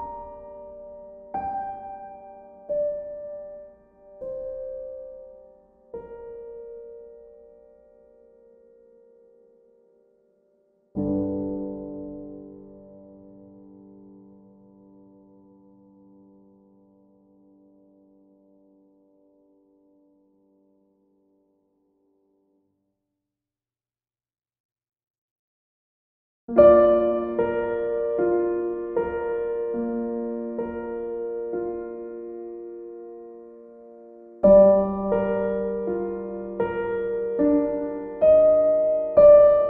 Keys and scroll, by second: 20.7 e.